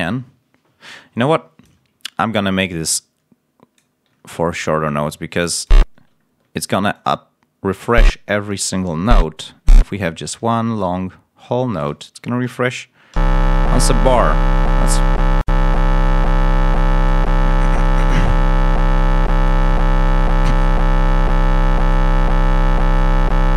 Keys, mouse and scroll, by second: 1.2 click, 2.8-3.9 drag, 4.1 ctrl+scroll up 1, 4.8 click, 6.1 ctrl+scroll down 2, 9.6 ctrl+a, 9.8 ctrl+scroll up 1, 10.7-11.9 alt+drag, 12.2 ctrl+alt+scroll down 1, 13.0 l, 14.2 ctrl+scroll down 1, 15.6-17.2 drag, 17.7-19.4 drag.